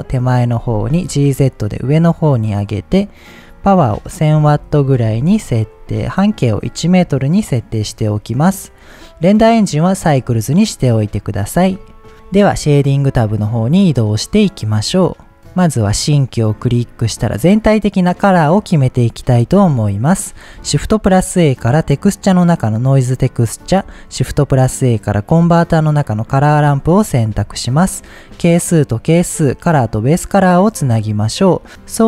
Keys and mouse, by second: 0.0-0.4 middle drag, 0.8 g, 1.0 z, 1.6 click, 2.8 click, 3.4-5.7 drag, 4.8 KP_0, 6.3-7.6 drag, 8.7 click, 11.2-11.5 middle drag, 11.8 click, 14.3-15.4 drag, 16.6 middle click, 19.6 middle click, 20.0 drag, 20.7 shift+a, 24.2 shift+a, 26.7 middle click, 27.5-28.5 drag, 29.0-30.1 drag, 30.6-31.0 drag, 31.1 click, 31.6-32.0 drag.